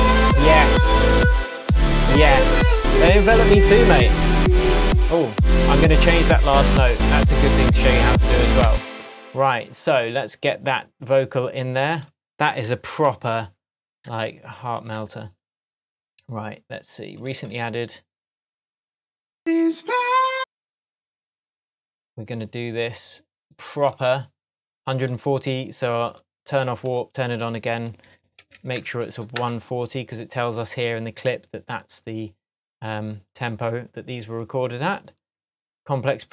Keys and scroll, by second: 8.6 space, 13.2 super+t, 28.4 i, 29.4 Return.